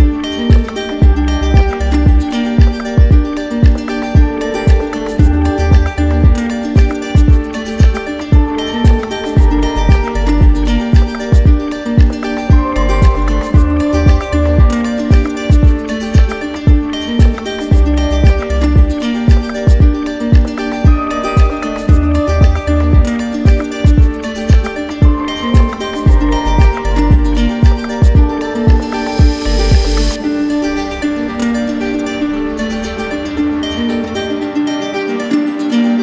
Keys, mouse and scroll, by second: 0.0 click, 0.9 alt+click, 1.0 alt+click, 2.0 click, 2.7 click, 3.0 click, 7.4 click, 7.8 shift+click, 8.5 alt+click, 9.0 click, 9.8 click, 11.0 w, 12.6 alt+click, 13.5 click, 14.1 shift+click, 20.3 click, 21.2 alt+click, 22.0 click, 22.6 click, 23.2 click, 24.1 click, 25.1 click, 25.9 click, 33.3 click, 35.0 click.